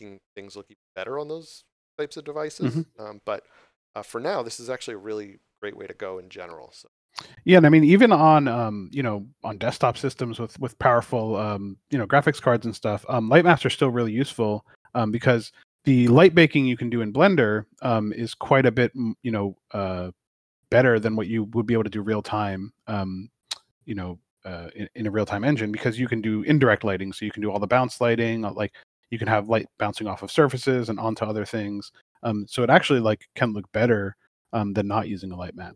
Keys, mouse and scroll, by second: 9.9 shift+middle click, 10.6 scroll down 1, 11.0 middle click, 13.4 click, 16.4 middle click, 17.4 scroll up 1, 27.7 click.